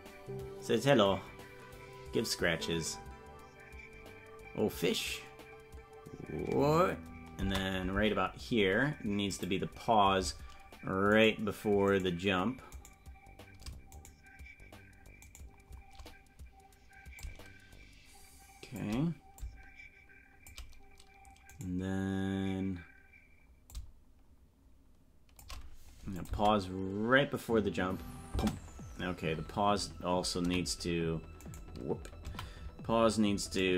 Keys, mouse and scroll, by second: 8.9 space, 9.2 click, 11.4 right click, 13.6 right click, 14.1 shift+right click, 17.1-18.8 shift+drag, 19.3-20.5 shift+drag, 21.8 right click, 23.6-25.4 shift+drag, 26.2 click, 26.3 space, 28.7 space, 30.4 z.